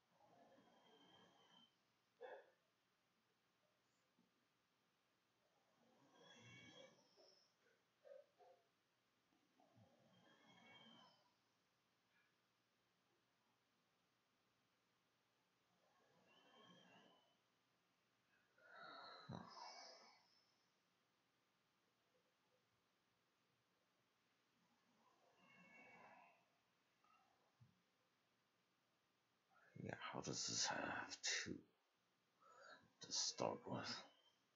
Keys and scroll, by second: 14.0-15.1 typing, 16.2 Home, 16.3 Home, 16.8 BackSpace, 18.5 Delete, 19.8-21.3 typing, 22.6 ctrl+shift+a, 23.2 ctrl+shift+s, 23.7 5.